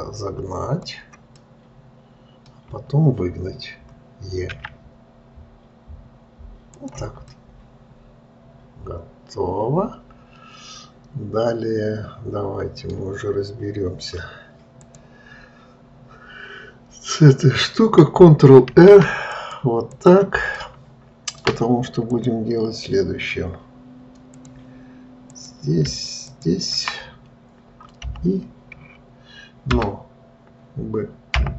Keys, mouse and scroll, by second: 1.7-4.8 middle drag, 7.6-10.7 middle drag, 15.2 click, 20.9-22.5 middle drag, 22.5 click, 24.7 click, 25.6 click, 26.6 shift+click, 28.4 i.